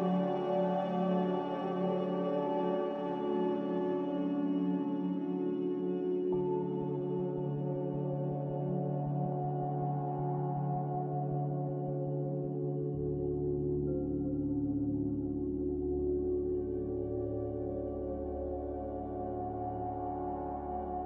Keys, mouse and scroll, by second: 0.6 ctrl+z, 1.0 ctrl+z, 18.1 z, 19.7 Delete.